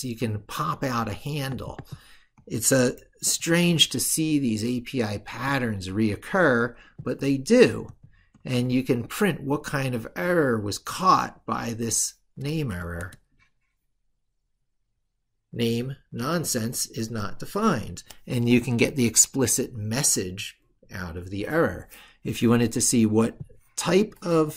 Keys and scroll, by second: 3.0 ctrl+c, 7.6 ctrl+v.